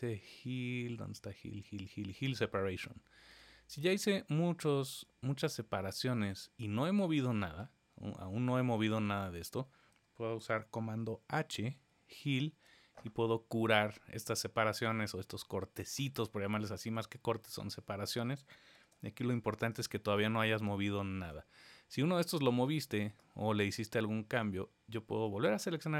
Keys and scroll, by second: 11.7 super+h, 18.8 super+z.